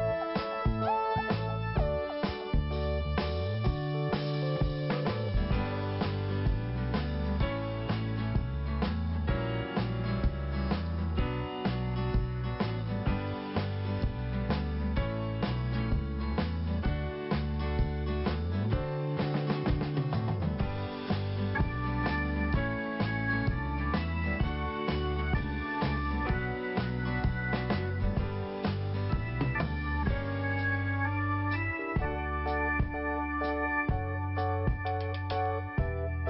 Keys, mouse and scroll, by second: 2.6 l, 3.9 click, 4.0 click, 4.6 scroll up 1, 5.8 click, 8.5 click, 8.5 click, 9.8 click, 14.1 click, 16.1 click, 18.5 click, 18.6 click, 19.5 click, 19.5 click, 20.0 click, 21.1 scroll up 1, 23.1 click, 23.2 click, 24.1 p, 25.3 click, 26.9 scroll down 2, 27.8 scroll up 1, 29.5 click, 31.6 click, 33.4 click, 35.2 l.